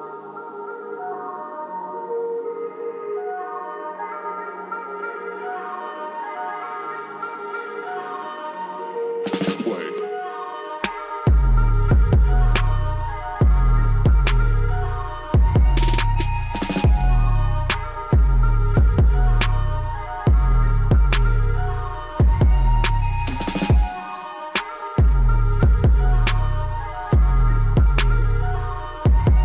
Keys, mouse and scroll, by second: 2.4 scroll up 1, 3.9-6.9 drag, 6.9 scroll down 1, 10.0 scroll up 1, 11.6-12.1 scroll down 1, 12.8 scroll up 1, 13.5-15.6 drag, 15.6 scroll down 1, 18.4 click, 21.7 click, 24.0 ctrl+z, 28.7 click.